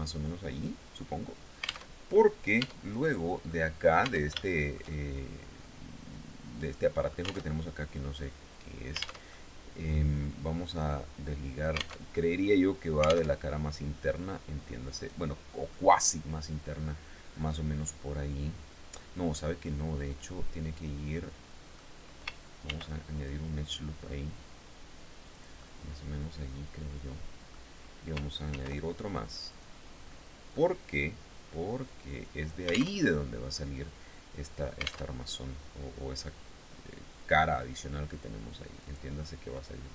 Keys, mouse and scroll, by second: 1.5 alt+Tab, 2.2 Tab, 2.5 right click, 3.0 middle click, 3.6 Tab, 4.0 shift+middle click, 4.8-7.0 drag, 7.0 alt+Tab, 8.8 alt+Tab, 8.8 alt+click, 11.5 alt+Tab, 12.8 alt+Tab, 14.5 right click, 15.2-18.7 drag, 18.9-21.4 drag, 22.2 ctrl+r, 22.7 ctrl+click, 24.9-27.2 drag, 28.0 ctrl+r, 29.0 click, 31.6 click, 32.5 alt+Tab, 34.6 alt+Tab, 36.8 click, 38.4 right click, 38.8-39.1 scroll down 2, 39.1-39.9 middle drag.